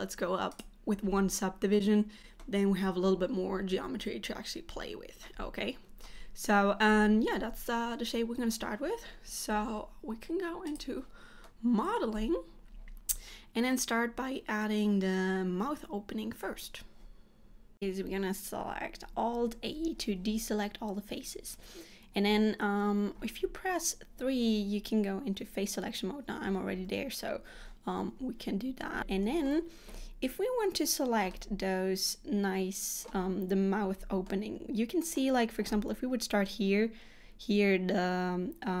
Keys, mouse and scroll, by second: 2.0 click, 2.0 middle click, 5.4 middle click, 29.1 middle click, 31.4 middle click, 33.1-34.0 scroll up 1, 34.0-34.4 scroll down 2, 34.4 middle click.